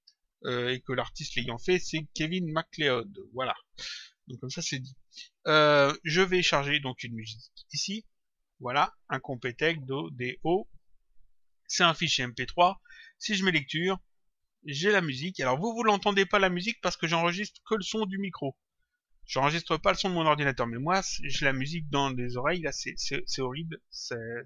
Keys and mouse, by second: 6.0 click, 13.6 click.